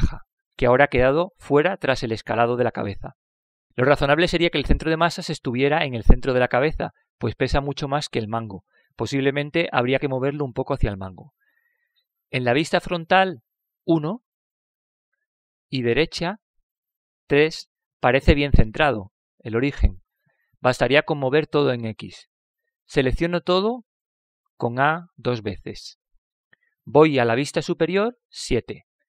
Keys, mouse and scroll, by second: 15.2 KP_1, 16.6-18.6 middle drag, 19.2 KP_3, 26.1 a, 26.7 a.